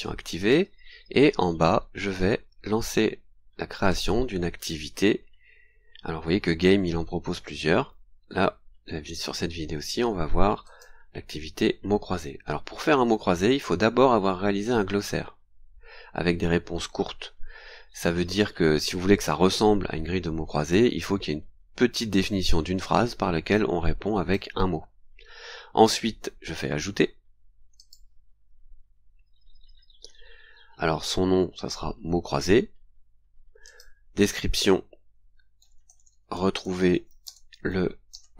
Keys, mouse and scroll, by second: 0.4 click, 0.8-2.0 scroll down 5, 3.9 click, 5.1-6.1 scroll down 4, 10.6 click, 14.6 click, 22.2 click, 27.8 click, 32.7-33.1 scroll down 2, 33.7 click, 35.4-38.3 typing.